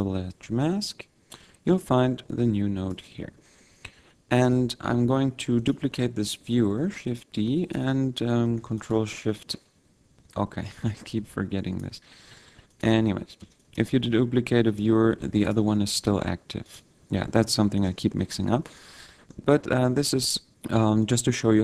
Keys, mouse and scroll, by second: 1.1 scroll down 2, 1.6 click, 3.5 middle click, 5.7 click, 6.9 shift+d, 7.8 click, 9.0 ctrl+shift+click, 11.8 click, 13.0 ctrl+shift+click, 13.7 ctrl+click, 14.9 ctrl+click, 15.6 ctrl+shift+click, 16.9 click, 18.7 scroll up 1, 18.9 middle click, 20.0 click, 21.2 click.